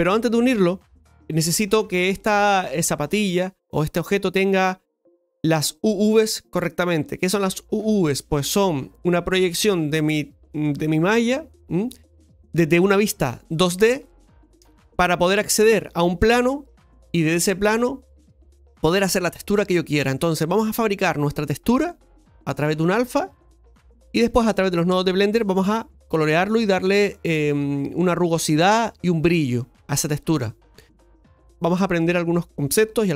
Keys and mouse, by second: 0.8 right click, 1.1 Tab, 3.3-33.1 middle drag.